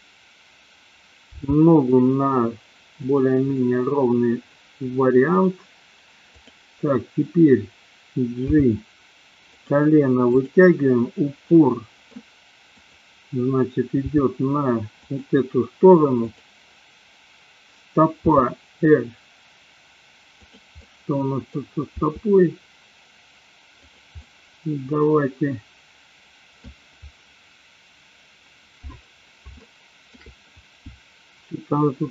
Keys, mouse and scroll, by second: 1.3 g, 3.2 click, 3.6-5.4 middle drag, 6.3 click, 8.6 g, 9.7 click, 10.3 click, 11.6-12.1 middle drag, 12.7 click, 14.3 g, 16.2 click, 18.3 r, 20.7 click, 20.8 middle click, 22.1 r, 23.9 click, 24.2-26.7 middle drag, 29.7 shift+middle click.